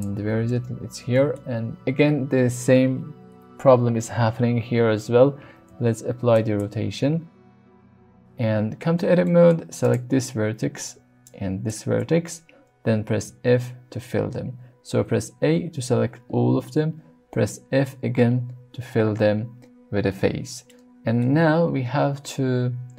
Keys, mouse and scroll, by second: 0.0-0.5 drag, 0.5-1.0 middle drag, 1.1 shift+middle drag, 5.5 ctrl+a, 6.8 middle click, 7.1-7.5 scroll up 1, 7.5 Tab, 7.5 a, 7.7 scroll up 1, 7.8 middle click, 9.3 middle click, 9.8 click, 11.2 shift+click, 13.3 f, 15.0 a, 18.1 f, 20.7 middle click.